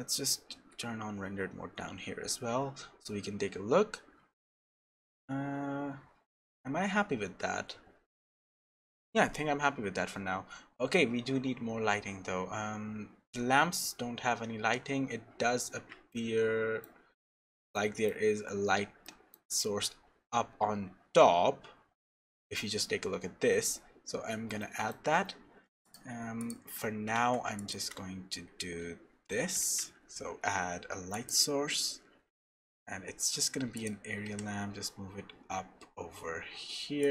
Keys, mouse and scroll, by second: 0.3 z, 15.5-16.1 scroll up 1, 16.1 middle click, 16.1-17.2 scroll up 2, 17.2-17.7 scroll up 2, 17.7 middle click, 18.4-19.0 scroll up 2, 19.0 middle click, 22.3-22.9 scroll up 2, 22.9-24.0 scroll down 1, 24.0-24.4 scroll down 11, 24.6 shift+middle click, 25.8 click, 26.4 click, 27.1 shift+s, 28.8 z, 29.6 shift+a.